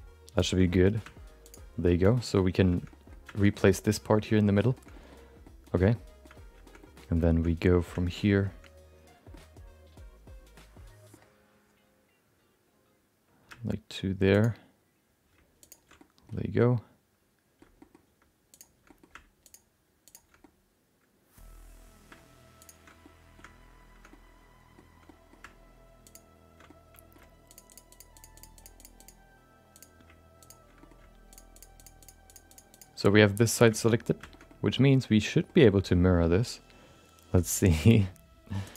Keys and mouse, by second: 0.3 ctrl+shift+click, 0.8 middle click, 2.2 middle click, 2.9 middle click, 3.5 middle click, 4.5 middle click, 4.9 middle click, 5.5 middle click, 6.0 shift+middle click, 6.7 middle click, 7.5 middle click, 9.4-11.1 middle drag, 14.3 shift+click, 15.6 ctrl+shift+click, 16.1 middle click, 16.7 middle click, 17.8 shift+middle click, 18.5 shift+click, 18.8 middle click, 19.4 ctrl+shift+click, 20.0 shift+click, 20.4-22.6 middle drag, 22.6 ctrl+shift+click, 22.7 ctrl+shift+middle click, 23.0 middle click, 24.1 middle click, 25.2 middle click, 26.6 middle click, 27.5 shift+click, 28.1 shift+click, 28.6 shift+click, 29.7 shift+click, 31.5-32.8 shift+drag, 33.2 middle click, 33.7 shift+middle click, 33.9 middle click, 34.3 shift+middle click, 34.4-35.5 middle drag, 35.7 middle click, 37.7-38.7 drag.